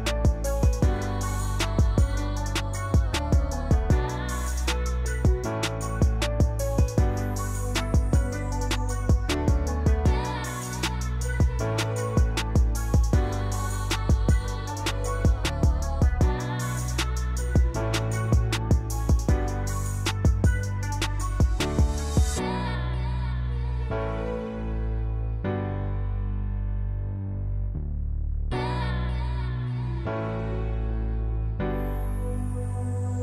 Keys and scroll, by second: 1.9-4.7 typing, 10.5-11.4 typing, 18.9-20.8 typing, 22.9 z, 27.6 v, 28.4 p, 31.0 l.